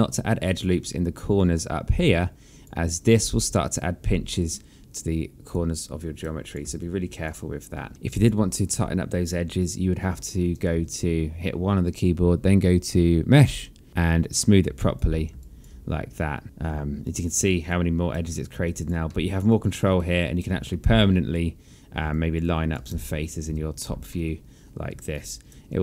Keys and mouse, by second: 1.6 click, 3.4 click, 5.4 click, 5.7 right click, 6.4 click, 6.8 alt+click, 8.0 alt+click, 8.7 alt+middle click, 10.9 1, 13.5 click, 15.0 alt+click, 15.6 alt+click, 16.4 alt+middle click, 17.3 alt+click, 17.9 right click, 18.5 click, 18.9 alt+click, 19.3 alt+middle click, 19.7 alt+click, 20.2 right click, 20.9 alt+middle click, 22.3 alt+click, 23.1 space, 24.3 alt+middle click.